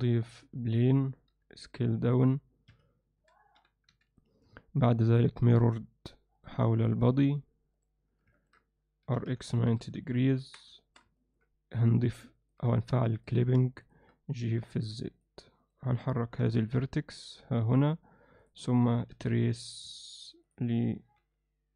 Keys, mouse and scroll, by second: 1.3 s, 3.2 s, 6.3-8.3 drag, 8.4 ctrl+alt+middle click, 9.1 r, 10.4 Tab, 10.8 alt+shift+middle drag, 11.2 ctrl+middle click, 12.0 click, 12.4 ctrl+alt+middle click, 14.5 g, 16.3 g, 19.2 f, 21.2 g.